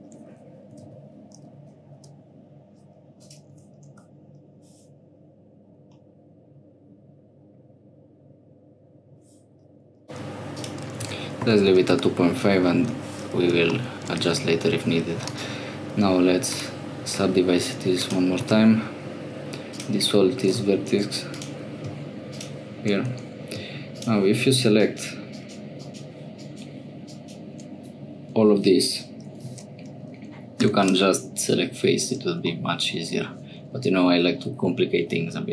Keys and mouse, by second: 6.0-7.6 middle drag, 10.6-12.7 middle drag, 13.8 shift+middle click, 14.3 2, 17.7 1, 18.0 click, 18.4 x, 20.9 1, 21.3 click, 30.7 3, 32.5 click.